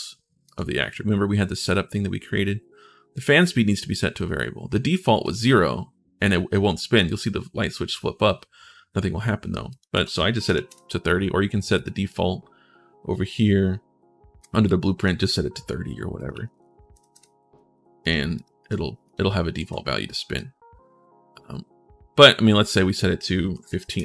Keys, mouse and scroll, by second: 2.9 click, 5.0 click, 9.4 click, 9.7 3, 11.5 click, 12.6-13.1 scroll down 1, 14.7 click, 16.0 click, 17.8 click, 18.1 click, 18.4 click, 19.3 ctrl+shift+s, 19.8 click, 22.4 click, 23.3 1.